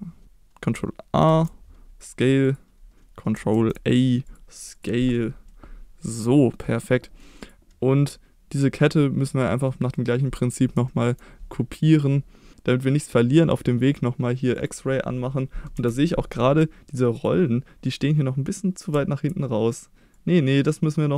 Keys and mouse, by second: 0.2 ctrl+s, 1.3 ctrl+a, 2.5 click, 3.5 ctrl+a, 4.8 click, 5.5-6.7 middle drag, 7.1 middle drag, 7.4 click, 8.1-8.6 middle drag, 9.7 middle drag, 10.9 shift+middle drag, 12.5 KP_1, 12.8 middle drag, 15.7 KP_1, 15.8 KP_1, 17.2 click, 18.9 Tab, 20.2-21.1 drag.